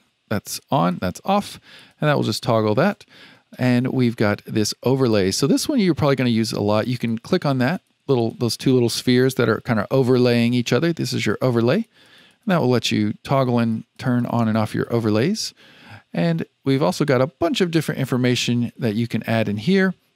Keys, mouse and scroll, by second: 0.4 click, 0.9 click, 1.7 click, 7.0 click, 7.7 click, 8.1 click, 11.0 click, 11.4 click, 11.7 click, 12.0 click, 12.2 click, 13.3 click, 13.5 click, 13.9 click, 14.1 click, 14.4 click, 14.7 click, 15.4-16.8 scroll up 1, 16.8-19.8 drag.